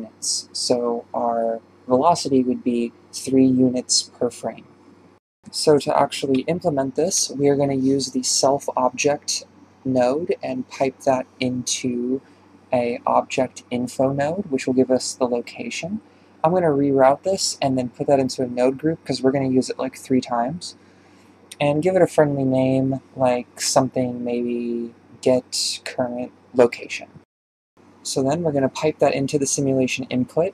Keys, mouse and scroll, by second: 0.7 d, 1.9-3.1 right drag, 3.1 d, 6.1-8.7 drag, 8.7 shift+a, 10.0 click, 14.6 r, 15.5-16.0 drag, 16.5 ctrl+g, 25.1 r, 26.6 drag, 29.5 click, 30.1-30.5 drag.